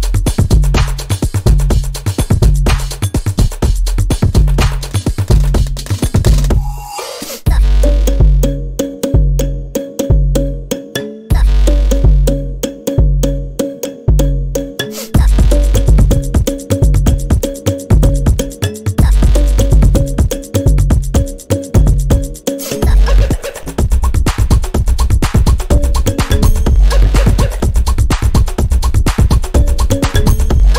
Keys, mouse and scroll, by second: 1.4 alt+click, 2.1 click, 4.2 scroll up 1, 4.7 click, 5.3 scroll up 1, 5.5 scroll down 1, 6.2 click, 8.6 alt+scroll up 1, 9.0-11.9 drag, 12.2-13.0 scroll up 1, 13.0 click, 14.4-15.8 scroll up 1, 15.8-18.7 drag, 19.2-20.4 typing, 20.1 click, 20.4 scroll down 1, 20.7-21.0 scroll up 1, 21.0 click, 25.1 scroll up 1, 25.3 scroll down 1, 25.8 click, 26.3 scroll down 1, 26.5-26.8 scroll up 1, 27.7-30.7 drag.